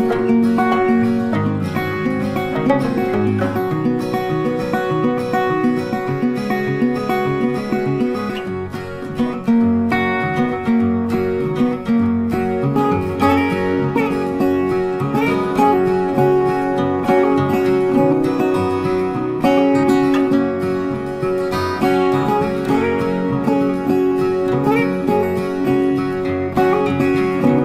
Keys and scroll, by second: 5.6 Delete, 8.2 ctrl+d, 15.8 ctrl+t.